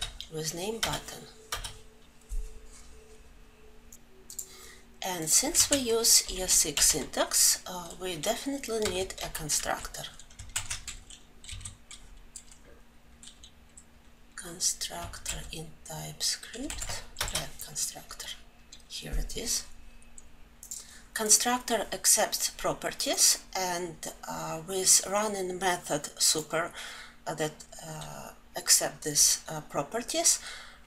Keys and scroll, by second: 10.3 ctrl+j, 17.0 Return.